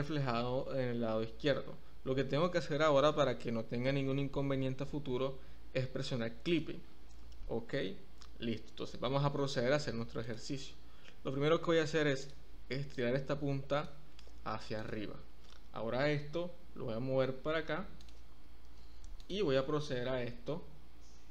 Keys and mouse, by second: 0.1 Escape, 12.2 click, 13.0 click, 14.7 click, 16.1 g, 18.0 click, 20.2 g.